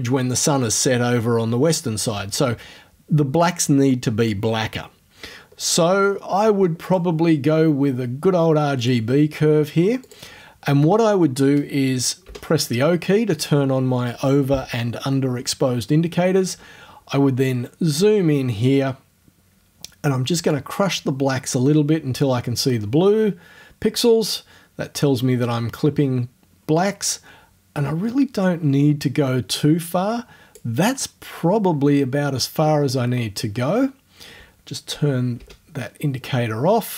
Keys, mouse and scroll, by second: 5.2-5.8 scroll down 2, 6.8 click, 8.8 click, 10.1 click, 12.3 o, 20.6-30.8 drag, 35.4 o.